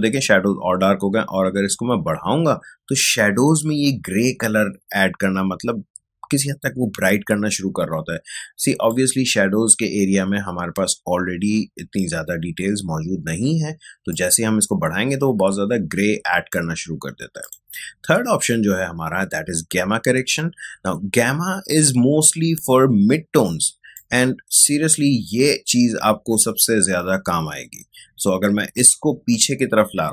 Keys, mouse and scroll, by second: 14.1-17.4 drag, 23.9-30.1 drag.